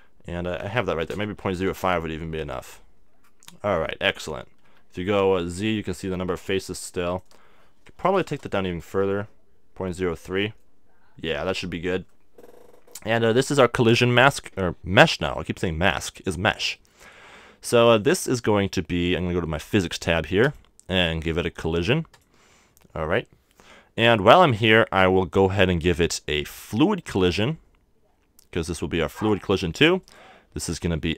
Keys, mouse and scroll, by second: 3.5-7.8 middle drag, 4.6 z, 7.8-9.2 drag, 10.3 z, 10.6-18.4 middle drag, 18.4-20.4 scroll up 1, 20.4-25.4 drag, 27.0-31.1 drag.